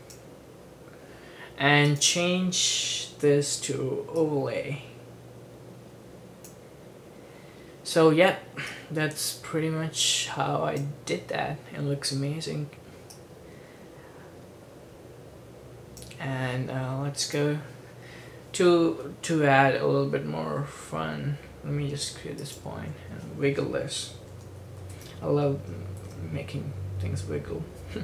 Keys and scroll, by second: 3.2 F4, 24.0-26.1 typing, 27.9-28.0 typing.